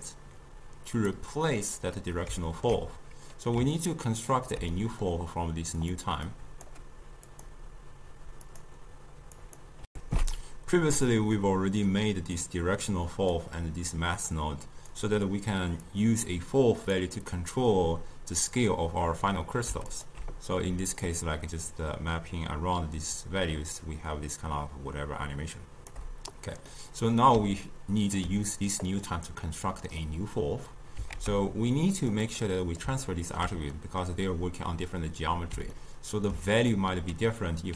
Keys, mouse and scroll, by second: 0.1-1.5 drag, 1.5-6.3 middle drag, 6.3-9.9 drag, 9.9 ctrl+shift+q, 11.4-12.4 middle drag, 12.4 click, 14.0 click, 15.9 click, 20.0 alt+shift+click, 21.1-24.1 shift+drag, 26.8-28.9 middle drag, 28.9 click, 31.2 ctrl+a, 32.5-37.7 middle drag.